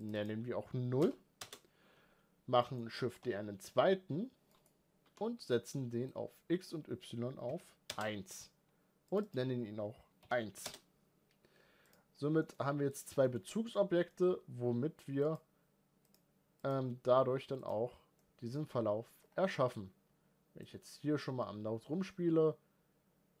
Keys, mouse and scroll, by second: 2.4 middle click, 2.9 shift+d, 4.8 n, 7.7-8.9 drag, 11.7 click, 12.2 middle click, 12.3-12.7 scroll up 3, 12.7 click, 13.0 shift+middle click, 13.5-13.8 scroll up 1, 13.9-15.9 middle drag, 15.9-18.0 drag, 18.0 middle click, 18.4 scroll down 2, 18.9-20.4 scroll up 2, 20.4-23.4 drag.